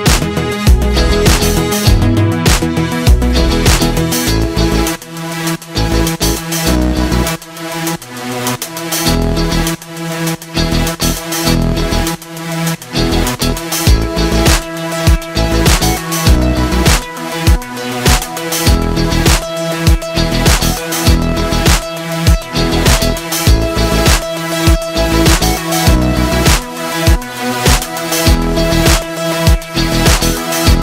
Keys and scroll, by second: 6.1 z, 6.2 space, 6.6 ctrl+g, 7.0 v, 8.9 z, 9.9 space, 10.9 v, 12.6 shift+Up, 13.0 space, 13.6 l, 13.9 z, 18.0 i, 18.3 z, 18.4 space, 19.7 space, 20.1 i, 21.0 v, 21.9 ctrl+[, 25.7 ctrl+g, 26.5 z, 26.6 space, 28.0 v, 29.8 ctrl+z.